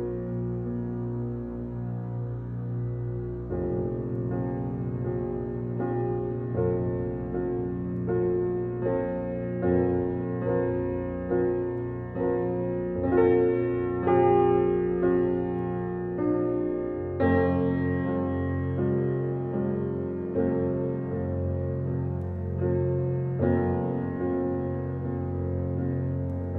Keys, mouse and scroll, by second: 0.8 scroll down 3, 1.0-2.3 middle drag, 3.5-5.3 shift+middle drag, 5.3 shift+a, 6.6 x, 7.0 shift+a, 8.2 g, 9.7 alt+middle click, 10.3 scroll up 1, 10.5 shift+middle click, 10.9 s, 12.6 g, 13.4 alt+middle click, 13.8-14.2 shift+middle drag, 14.2 s, 16.1 g, 16.9 g, 18.8 r, 22.7-23.4 middle drag, 23.4 scroll up 2, 23.7-24.4 shift+middle drag, 24.4 g.